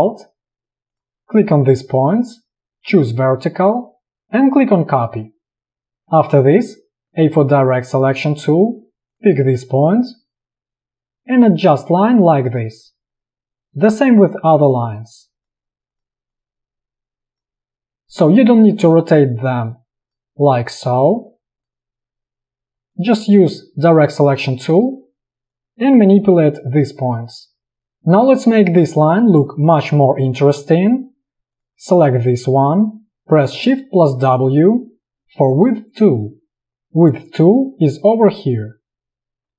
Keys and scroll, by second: 5.8 space, 7.1 a, 18.8 v, 22.7 a, 34.3 shift+w.